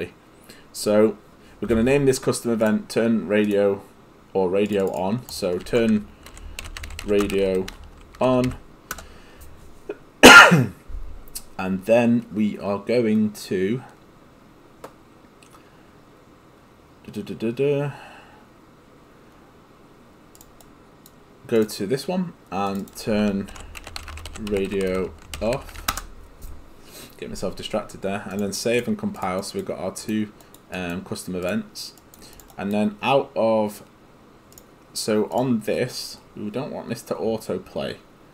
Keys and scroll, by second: 5.7 ctrl+a, 6.1-8.5 typing, 9.0 Return, 23.3-26.1 typing.